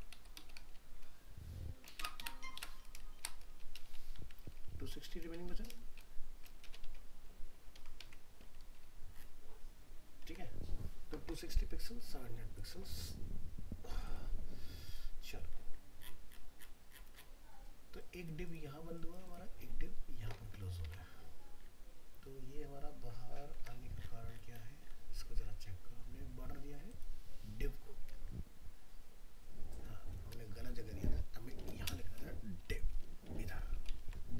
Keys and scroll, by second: 6.9 ctrl+s, 8.0 alt+Tab, 20.8 alt+Tab, 34.0 ctrl+s.